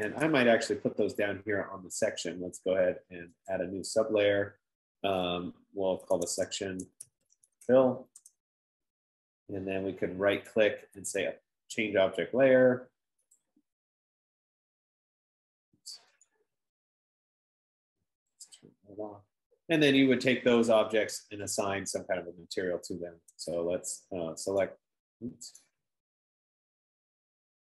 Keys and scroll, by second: 6.4-10.1 typing, 8.6 Return, 11.9-14.6 typing.